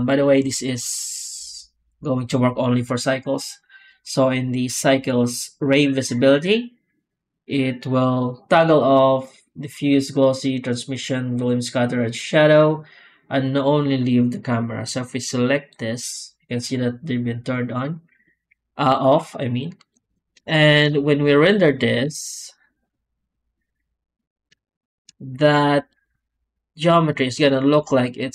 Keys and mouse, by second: 15.4 click, 19.9 alt+a, 21.4 middle click, 21.9 z, 24.1 click.